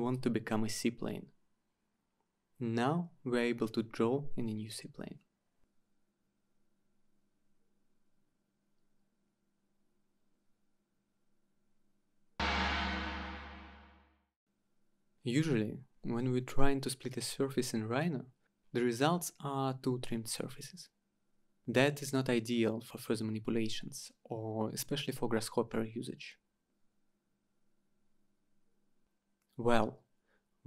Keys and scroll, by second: 22.6-24.9 typing, 25.6 Return.